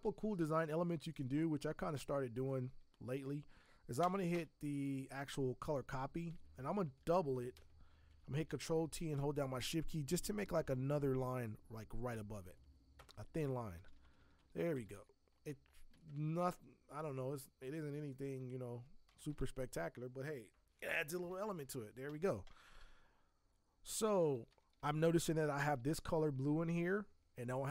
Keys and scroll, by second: 0.0 z, 1.6 space, 2.8 Tab, 4.0 b, 4.3 v, 7.0 ctrl+j, 8.5 ctrl+t, 13.0 Return, 13.5 Up, 13.7 Up, 13.8 Up, 14.0 Up, 14.2 Up, 14.4 Up, 14.6 Up, 14.7 Up, 14.9 Up.